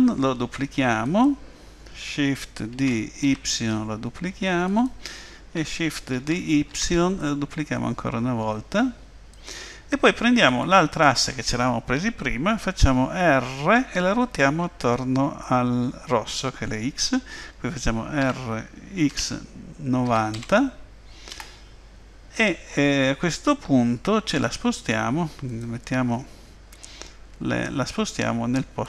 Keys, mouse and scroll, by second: 2.7 shift+d, 6.2 shift+d, 10.5 click, 18.3 r, 25.5 click, 27.9 click.